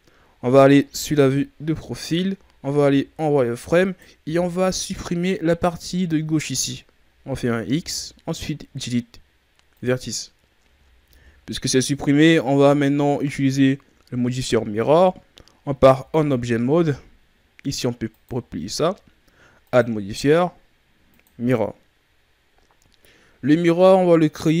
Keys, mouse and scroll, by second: 1.2 KP_3, 2.1-2.6 ctrl+scroll down 5, 2.6 z, 3.8 right click, 4.1 b, 10.7 scroll up 4, 11.0 z, 11.4-11.7 ctrl+scroll down 1, 11.7-13.5 ctrl+scroll up 4, 13.5-14.9 scroll up 1, 15.9 Tab, 18.0-22.7 drag, 23.2-24.1 scroll down 4, 24.2-24.6 ctrl+scroll down 1.